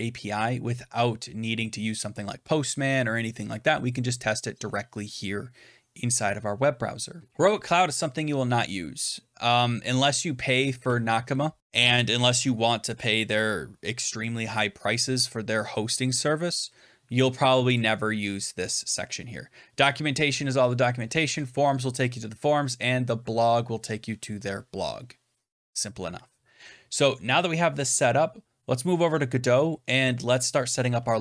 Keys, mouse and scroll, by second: 7.3 click, 17.7 click.